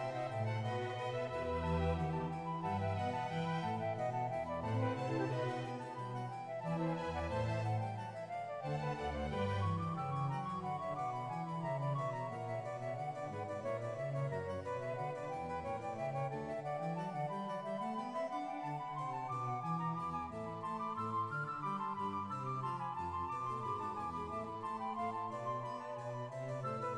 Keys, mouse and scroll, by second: 2.3 shift+middle click, 3.3 click, 3.8 scroll up 2, 4.2 shift+click, 4.2 right click, 4.2 g, 6.1 right click, 6.1 2, 6.2 right click, 6.9 1, 7.0 right click, 7.1 g, 7.5 right click, 7.5-7.9 scroll down 1, 7.9 scroll up 6, 8.2 scroll down 1, 8.4-10.0 drag, 9.8 right click, 9.8 g, 10.9 shift+middle click, 10.9-11.5 scroll up 4, 11.5 ctrl+right click, 12.2 click, 12.2 e, 12.2 y, 13.1 e, 13.1 z, 13.4 click, 15.1 g, 15.3 click, 15.3 middle click, 15.3 scroll up 3, 15.6-16.2 scroll down 2, 16.2 click, 16.3 right click, 16.5 right click, 16.5 g, 17.3 click, 17.3 right click, 17.3 g, 17.6 right click, 18.2 shift+middle click, 18.2 ctrl+right click, 18.3 shift+middle click, 18.3 g, 19.3-23.0 drag, 19.3 right click, 19.3 g, 23.0 right click, 26.2 click, 26.2 shift+middle click, 26.4-26.9 scroll down 2.